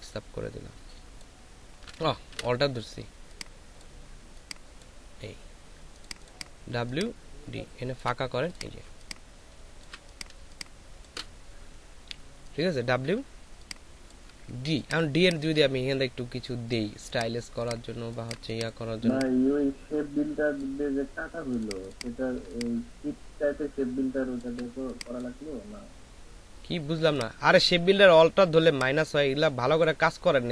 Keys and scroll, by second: 2.3 ctrl+alt+z, 8.8 ctrl+alt+space, 10.3 ctrl+alt+space, 13.3 space, 14.6 ctrl+space, 15.0 typing, 17.9 typing.